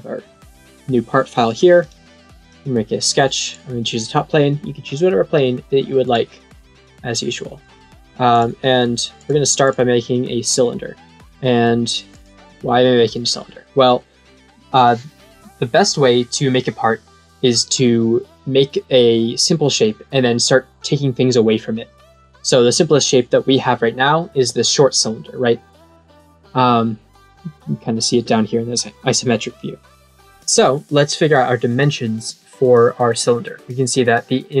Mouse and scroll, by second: 1.8 click, 2.4 click, 3.4 click, 4.8 click, 6.0 click, 8.2 click, 9.1 click, 9.6 click, 12.0 click.